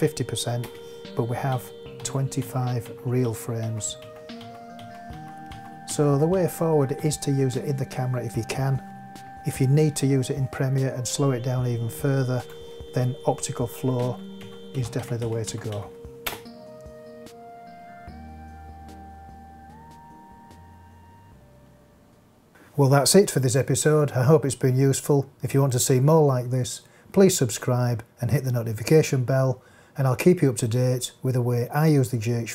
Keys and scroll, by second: 0.6 space, 1.4 Right, 14.0 Right, 16.2 space.